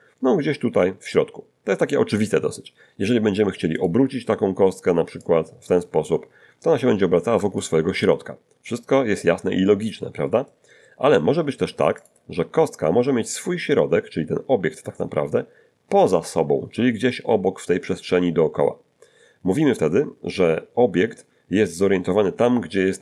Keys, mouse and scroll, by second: 3.8 click, 5.2-7.8 drag, 7.3 Escape, 10.0 scroll down 1, 10.4 middle click, 12.0 click.